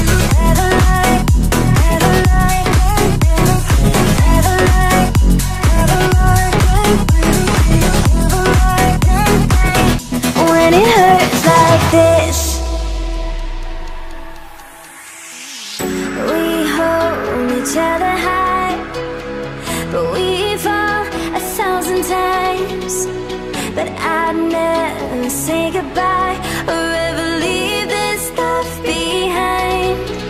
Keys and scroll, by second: 25.0 Right.